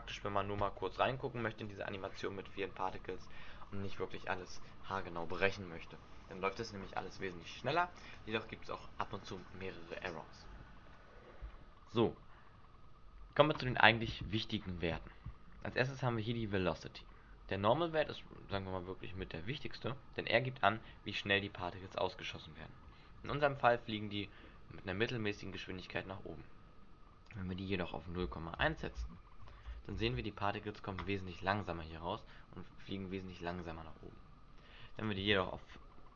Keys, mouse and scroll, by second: 14.4 click, 23.3 alt+a, 25.7 Escape, 27.2 click, 29.9 alt+a, 31.4-31.8 scroll up 6, 32.2 middle click, 33.4 middle click, 33.9 Escape, 34.9 click.